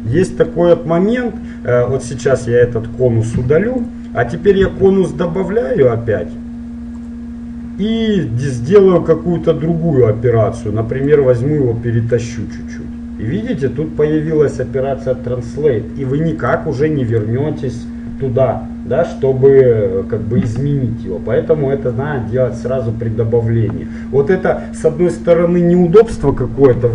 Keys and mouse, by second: 3.4 x, 11.1-13.0 drag, 16.5 right click, 17.5-19.1 right drag.